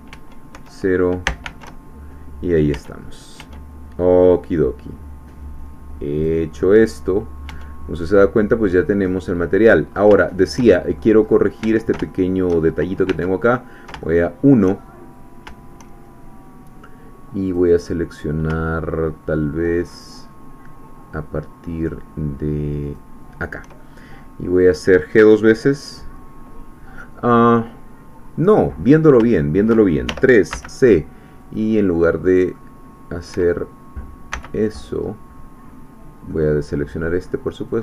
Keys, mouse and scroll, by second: 0.2 Tab, 0.6 KP_0, 1.8 shift+Tab, 2.7 Tab, 4.2-6.1 scroll down 2, 6.1 click, 6.7-7.1 scroll down 2, 7.5 Tab, 8.0 scroll down 1, 8.4-9.8 middle drag, 9.9 scroll up 1, 10.2 shift+middle click, 11.2 shift+scroll up 2, 11.6 Tab, 12.1 shift+middle click, 12.6-13.0 shift+scroll up 1, 13.2 1, 14.0 shift+middle click, 15.0-15.4 shift+scroll up 4, 17.5 click, 19.9 shift+click, 22.8 shift+click, 24.1 shift+scroll down 3, 29.3 shift+middle click, 30.1 shift+3, 30.5 shift+c, 31.4 click, 32.4 middle click, 33.3 Escape, 34.3 c, 34.6-35.1 scroll up 1, 36.3 middle click, 37.7-37.8 drag.